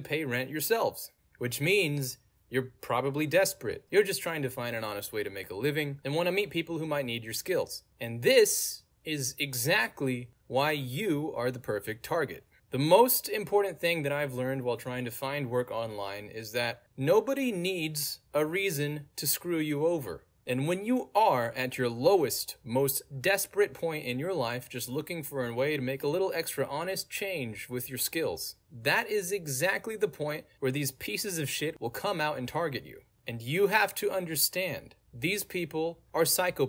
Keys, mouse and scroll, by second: 0.1-1.2 scroll down 1, 1.2-2.4 scroll down 1, 2.7 click, 6.7 click, 8.8-10.1 scroll down 2, 10.1-12.5 scroll down 1, 12.8 click, 13.6 click, 15.8 middle click, 15.8 scroll down 2, 17.6 click, 18.5-22.2 middle drag, 18.6-19.6 scroll down 2, 19.6-21.0 scroll down 1, 21.0-22.2 scroll down 1, 22.8 click, 24.3-26.4 middle drag, 24.3-26.4 scroll down 2, 26.7 click, 27.2 middle click, 27.2-27.6 scroll down 2, 28.6-29.1 scroll up 2, 29.0 middle click, 29.1-29.4 scroll down 2, 30.9 click.